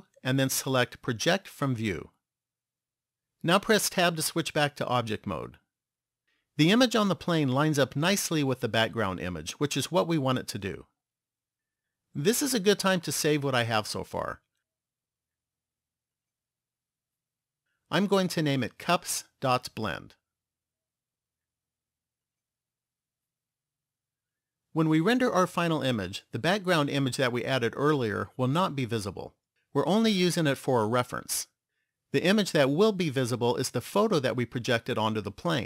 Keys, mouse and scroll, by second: 0.2 u, 4.2 Tab, 13.3 click, 23.7 click.